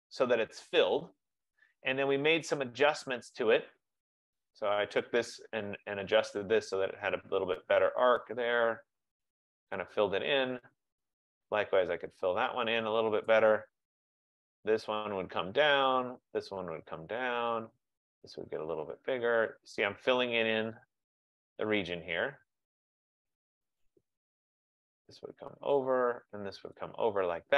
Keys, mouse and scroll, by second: 2.9 click, 5.1 click, 9.8 click, 13.5 click, 15.5 click, 17.5 click, 21.4 click, 23.7 click, 25.8 click.